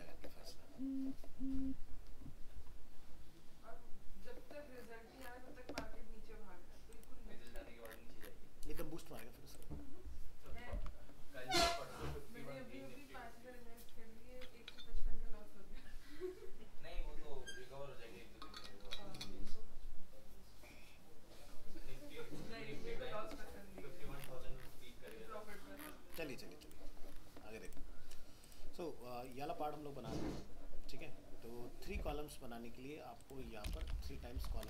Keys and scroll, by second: 10.7 ctrl+s, 32.0 alt+Tab, 34.4 ctrl+c.